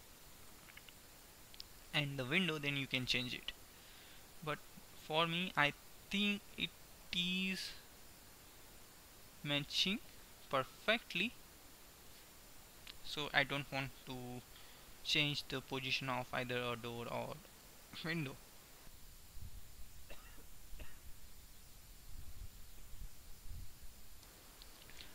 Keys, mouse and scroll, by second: 2.2 right click, 2.5 middle click, 3.5 middle click, 4.5 KP_3.